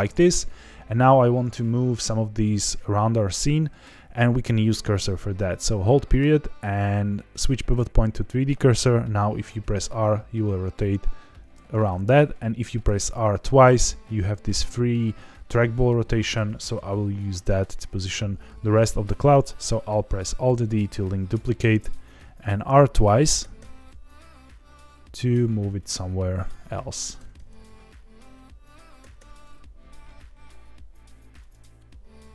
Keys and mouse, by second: 0.0 click, 0.2 g, 0.3 z, 1.4 click, 9.4 r, 11.4 Escape, 12.6 r, 12.8 r, 15.9 Escape, 21.3 alt+d, 23.3 r, 23.5 r, 25.7 click, 27.1 alt+d, 27.3 alt+d, 29.0 r, 29.1 r, 31.3 click.